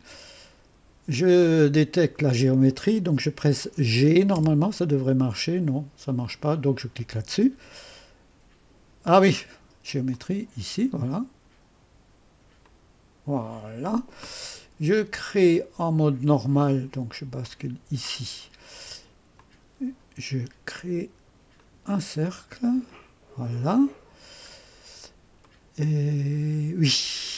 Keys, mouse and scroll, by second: 4.3 g, 6.2 click, 10.1 click, 12.6 click, 17.4 click, 19.4 click, 19.8 click, 21.6 click, 22.9 click, 24.6-25.1 scroll down 2, 25.5-27.3 right drag.